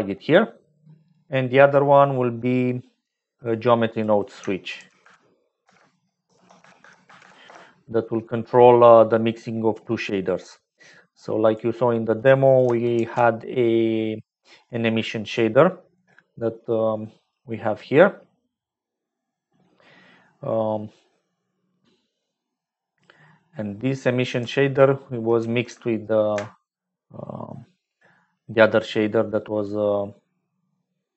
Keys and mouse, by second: 0.1-1.2 drag, 3.1 click, 3.9 click, 4.4-5.8 shift+drag, 8.2 middle click, 9.0 click, 11.0 click, 12.9 shift+a, 23.2 middle click, 26.1 ctrl+shift+click, 26.2 ctrl+shift+right click, 28.2 middle click, 29.3 click, 30.3 middle click.